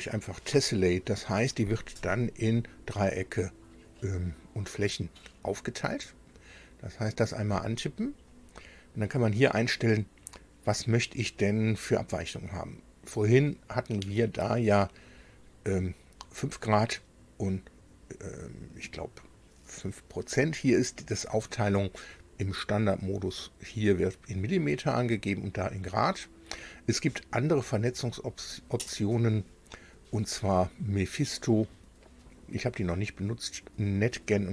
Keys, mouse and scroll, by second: 7.4 click, 28.0 click, 34.0 click.